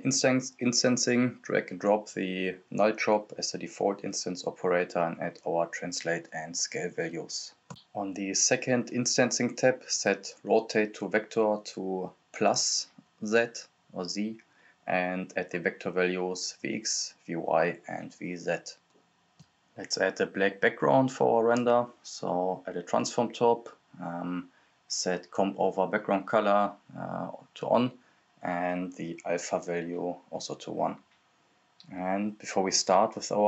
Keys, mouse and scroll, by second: 3.4-7.5 typing, 4.0 click, 4.9 click, 5.7 click, 8.4 click, 14.0-15.8 typing, 14.1 Tab, 14.7 Tab, 17.1 click, 17.1-17.5 scroll up 1, 17.5-21.3 drag, 21.3-21.7 scroll up 1, 21.7 click, 23.6 right click, 24.4-25.8 typing, 26.3 click, 31.3 Return.